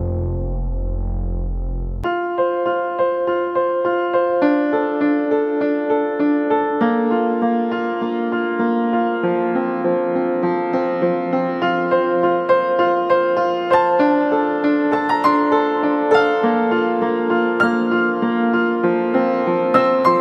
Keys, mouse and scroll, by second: 3.5 ], 5.8 double click, 7.7-9.0 typing, 10.9 typing, 14.3 double click, 14.9 typing, 19.0 typing.